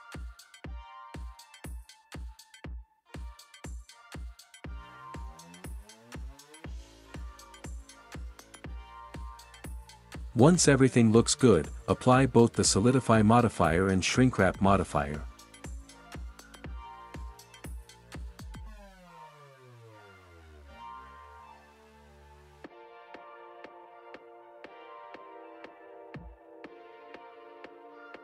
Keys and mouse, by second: 7.9 ctrl+s, 21.9-22.6 drag, 25.8-26.9 middle drag.